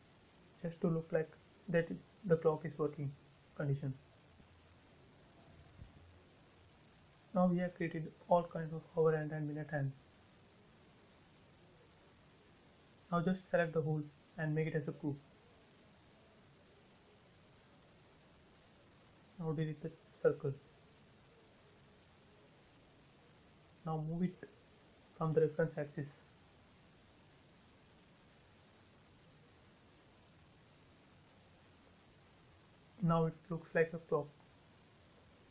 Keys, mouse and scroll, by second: 4.2 click, 4.4 space, 4.6 scroll down 1, 6.3 click, 6.8 scroll up 1, 7.4 scroll up 1, 7.6 shift+middle click, 8.0 middle click, 8.4 scroll down 1, 9.2 scroll down 1, 9.5 shift+middle click, 10.0-10.4 scroll down 1, 11.3 click, 12.1 click, 13.4 scroll up 1, 14.8 right click, 16.2 click, 16.4 space, 16.7 scroll down 1, 17.9 click, 18.8 Delete, 19.5 scroll down 1, 20.1 shift+middle click, 20.8 scroll up 1, 23.2 m, 23.4 click, 24.1 space, 25.1 m, 25.8 click, 26.8 Right, 28.3 click, 28.5 space, 29.0 shift+middle click, 29.7 scroll up 1, 30.8 middle click, 31.9-32.2 scroll up 1, 32.5-35.5 middle drag.